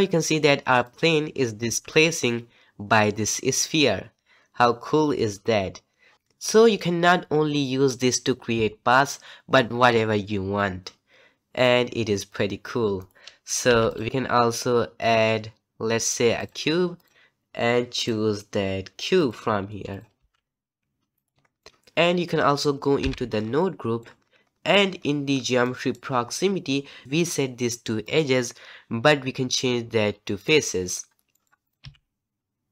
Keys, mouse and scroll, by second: 0.9 click, 1.6 g, 13.9 x, 16.4 shift+a, 17.0 click, 19.2-19.9 drag, 20.1 g, 21.5 scroll up 1, 21.5 middle click, 21.7 click, 22.0 click, 30.4 click, 31.1 scroll down 1, 31.3 middle click, 31.6 click, 31.8 g.